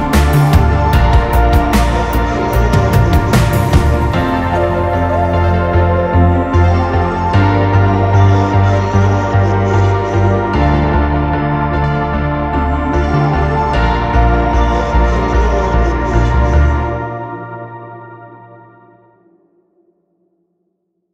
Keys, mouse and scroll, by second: 0.6-3.8 typing, 7.4-8.7 typing, 10.0-10.8 typing, 12.9-17.1 typing, 18.9 typing, 20.6-21.1 typing.